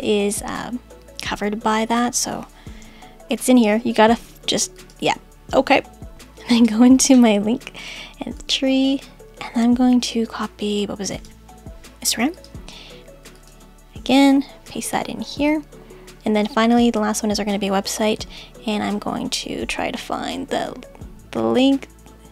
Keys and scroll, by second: 14.7 super+v.